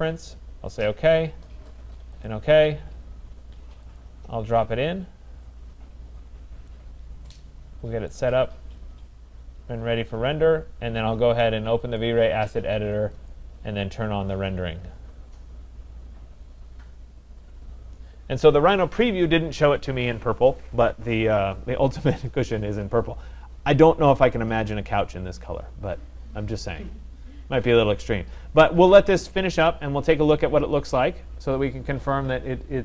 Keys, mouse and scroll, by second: 0.9 click, 2.3 click, 4.0 click, 4.5-5.9 scroll, 6.1 scroll, 8.1 right click, 8.5-9.0 scroll, 9.0-10.6 scroll, 12.0 click, 13.1 middle click, 13.3 click, 13.4 middle click.